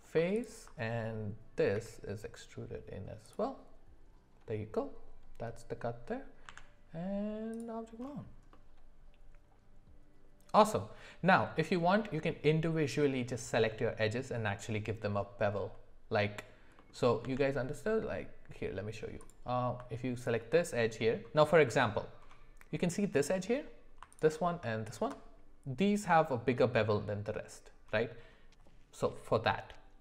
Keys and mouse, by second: 1.7 e, 6.5 Tab, 8.5-10.6 middle drag, 16.7 middle click, 17.2 Tab, 19.2 click, 24.9 alt+shift+click.